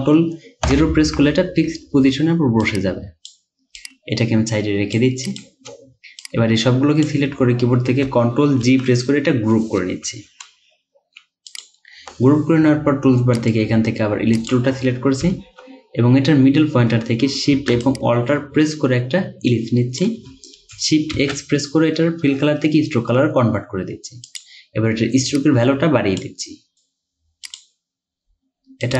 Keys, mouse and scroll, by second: 0.7 ctrl+0, 8.7 ctrl+g, 10.3 Down, 13.4 right click, 15.3-15.8 alt+scroll up 1, 17.9 alt+shift+click, 21.2 x.